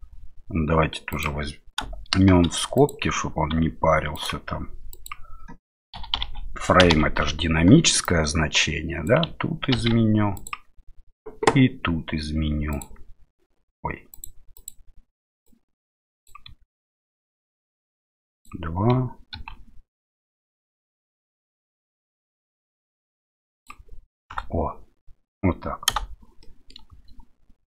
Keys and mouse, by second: 12.7-14.2 drag, 14.6-26.0 drag, 26.4 middle click, 26.9 space.